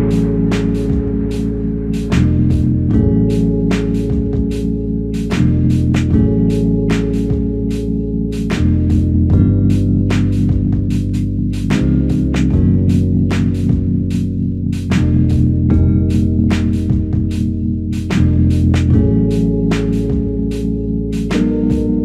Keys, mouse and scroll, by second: 10.4 alt+click, 14.8 scroll up 1, 15.4 f, 18.4 alt+click, 19.8 shift+click, 21.2 alt+click.